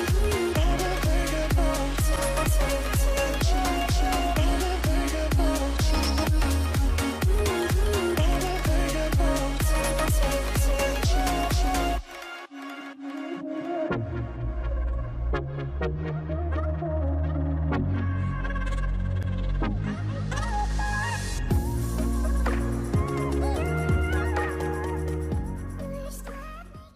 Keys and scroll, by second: 0.4-0.9 typing, 0.9 Return, 2.1 ctrl+g, 2.8-3.7 typing, 6.9 ctrl+z, 11.6 ctrl+g, 13.7-15.1 typing, 15.3 Return, 17.5 ctrl+z, 17.5 typing.